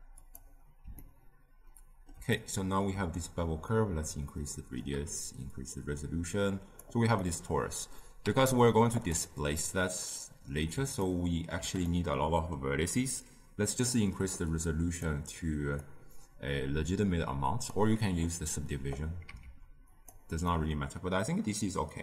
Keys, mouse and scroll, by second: 1.0-3.8 ctrl+middle drag, 3.8-7.2 shift+drag, 7.2-10.2 middle drag, 10.2 z, 11.0-13.9 ctrl+middle drag, 13.9-20.0 drag, 20.0 z, 20.4-22.0 middle drag.